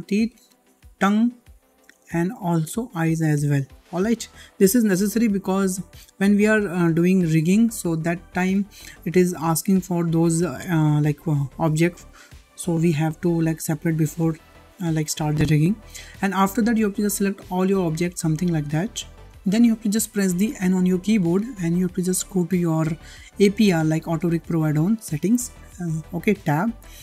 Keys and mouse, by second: 0.3-0.6 middle drag, 1.6 g, 3.0 click, 3.3 g, 5.6 alt+h, 7.8 `, 16.2-16.6 shift+middle drag, 17.1-19.0 drag, 19.6-20.1 shift+middle drag, 20.7 n.